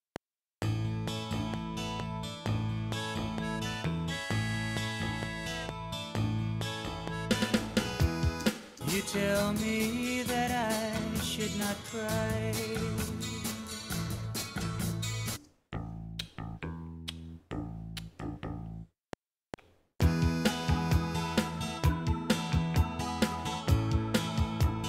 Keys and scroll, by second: 8.4 space, 15.4 space, 18.9 F7.